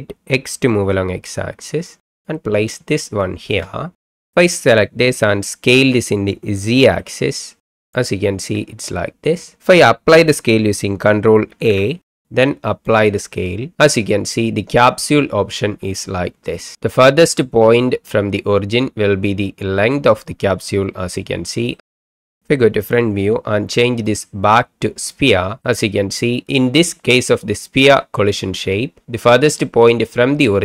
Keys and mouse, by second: 0.7 x, 2.2 click, 2.9 shift+click, 5.7 s, 6.8 z, 7.9 click, 11.5 ctrl+a, 21.7 middle drag, 22.0 middle click, 22.8 KP_1, 24.0-25.1 drag, 25.6-26.1 middle drag, 27.6 middle click.